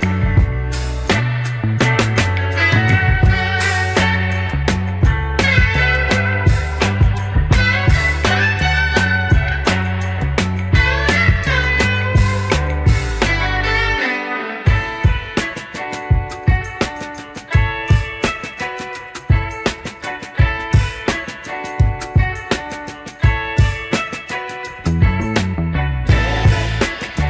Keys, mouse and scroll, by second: 0.0 click, 0.6 shift+middle drag, 1.0 scroll up 4, 1.5 shift+middle drag, 2.0 click, 2.9 middle click, 3.4 Tab, 4.2 click, 5.1 alt+click, 7.5 shift+d, 9.2 p, 10.5 Tab, 11.1 click, 11.6 click, 12.6-13.3 middle drag, 13.5 click, 14.2 middle drag, 14.8 click, 15.8 click, 16.1 click, 16.9 g, 18.2 ctrl+z, 18.5 click, 19.1 click, 19.6 click, 20.0 click, 21.3 g, 23.3 click, 24.2 g, 25.8 click, 26.4 g.